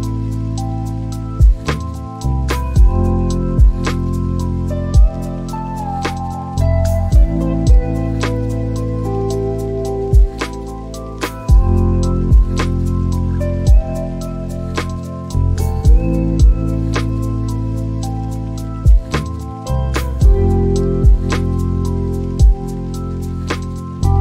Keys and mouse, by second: 2.2 click, 5.9 click, 6.3 click, 7.2 shift+a, 11.5 click, 12.7 click, 16.0 shift+right click, 19.0 click, 21.4 click, 23.3 click.